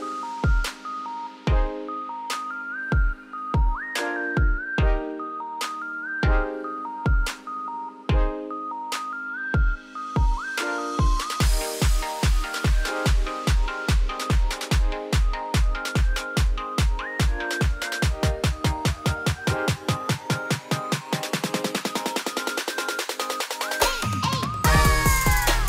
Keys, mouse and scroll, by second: 0.4 middle click, 0.6 g, 2.0-2.8 scroll up 2, 2.8 e, 3.7 `, 4.0 z, 4.6 shift+middle click, 4.9-5.5 scroll up 3, 5.5 a, 6.3 shift+n, 6.5 middle click, 6.9 Tab, 7.3 z, 7.5 scroll down 1, 7.5-7.9 middle drag, 7.9 ctrl+s, 9.5 shift+click, 10.4 ctrl+KP_Subtract, 11.1 ctrl+s, 11.3-12.2 scroll up 1, 12.2 click, 12.6-12.9 middle drag, 12.9 Tab, 14.2 Tab, 14.5-15.1 middle drag, 15.7 z, 16.3 Tab, 16.8 1, 17.1 click, 17.7 g, 18.7 z, 18.9 scroll down 2, 19.0 middle click, 19.8-21.1 scroll up 2, 21.1 scroll up 1, 21.4 ctrl+b, 23.3 Tab, 23.5-24.2 middle drag, 24.2 click, 24.5-25.6 middle drag.